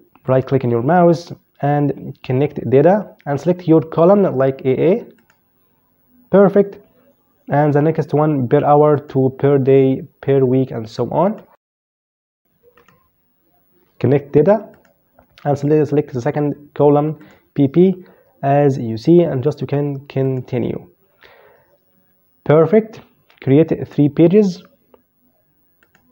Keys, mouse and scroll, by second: 4.3 click, 8.1 click, 10.4 right click, 11.5 click, 11.9 right click, 13.9 click, 16.4 click, 19.4 click, 24.9 click.